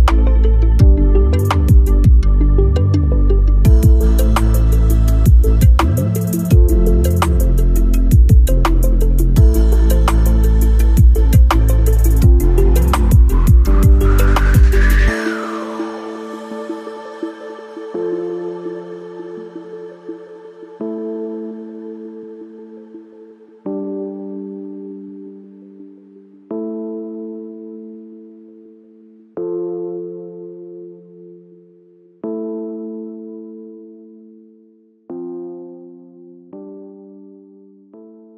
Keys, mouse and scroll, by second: 1.3 shift+click, 2.6-6.7 drag, 6.7 space, 8.9-10.2 alt+scroll down 2, 10.2-23.8 drag, 12.6 space, 15.1-19.0 alt+drag, 19.6 click, 21.3-23.0 drag, 25.3 alt+middle click, 26.5 alt+click.